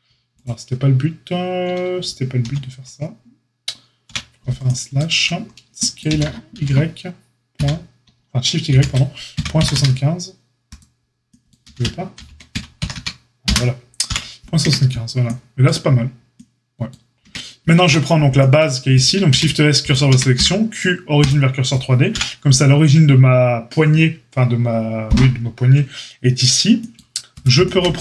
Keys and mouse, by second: 2.4 ctrl+KP_Subtract, 4.0 KP_Divide, 6.0 s, 11.6 s, 14.0 KP_Divide, 14.6 Tab, 17.2 Tab, 17.8 KP_Divide, 18.9 click, 19.1-27.3 shift+middle drag, 19.2 shift+s, 20.0 Tab, 20.3 q, 22.1 KP_Divide, 27.3 click, 27.4-28.0 shift+middle drag, 27.9 Tab.